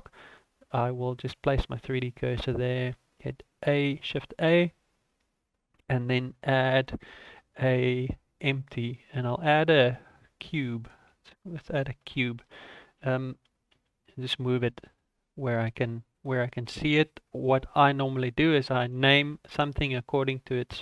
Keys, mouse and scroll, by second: 0.2 click, 2.7 shift+a, 12.9 g.